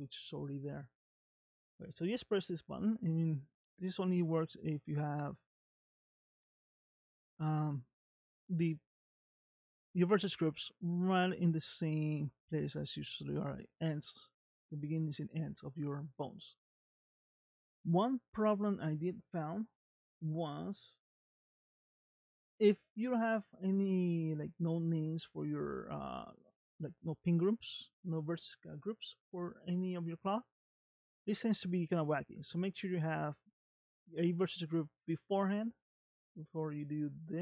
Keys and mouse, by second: 6.8 shift+middle click.